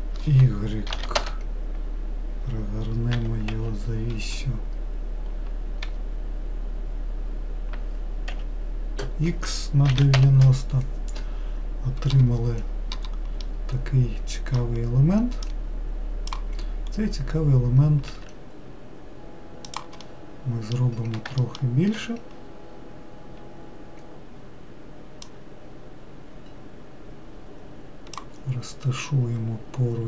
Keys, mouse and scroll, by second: 3.4 r, 13.7-15.7 middle drag, 15.7 click, 17.1-18.4 scroll up 3, 18.4 s, 20.3-21.7 middle drag, 22.6-25.5 scroll down 5, 25.5 click.